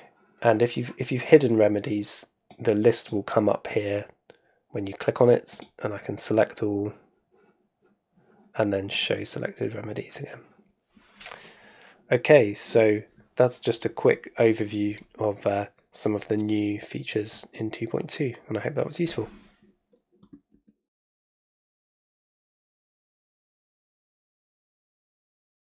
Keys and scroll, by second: 20.5 shift+super+2.